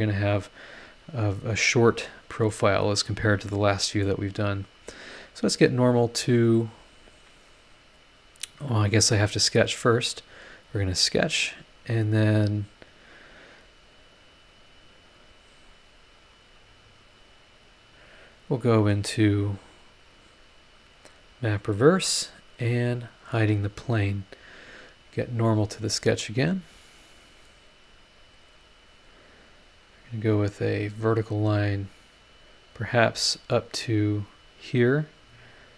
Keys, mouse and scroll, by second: 0.0 scroll down 1, 3.5 middle click, 3.6 click, 3.6 right click, 9.1 click, 9.4 click, 10.6 click, 11.8-12.1 scroll up 1, 14.3 click, 15.7 scroll down 1, 16.2 click, 17.7 click, 18.0-18.6 scroll down 3, 19.0 click, 19.7 click, 20.9 click, 21.3 click, 21.8 click, 23.2 click, 23.4 space, 25.7 click, 26.7-27.1 scroll up 1, 28.8 click, 30.6 click, 34.3 click.